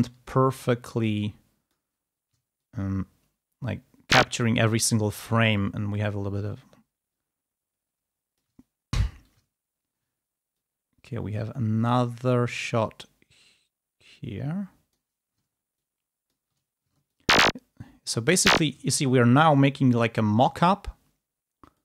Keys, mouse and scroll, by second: 0.4-1.8 ctrl+drag, 2.5-4.1 ctrl+drag, 4.3-4.7 ctrl+scroll up 2, 8.2 ctrl+click, 8.5 ctrl+scroll down 2, 9.5 ctrl+scroll up 2, 10.5-15.2 drag, 15.6 ctrl+click, 17.0-18.7 ctrl+drag, 18.7 ctrl+scroll down 2, 19.5-20.0 ctrl+scroll up 2, 21.7 click.